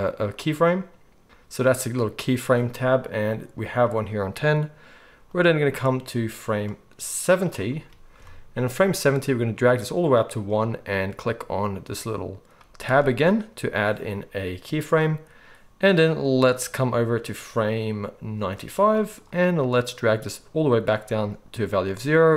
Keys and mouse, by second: 1.2-5.2 middle drag, 5.2-12.9 drag, 12.9-17.6 middle drag, 17.6-22.3 drag.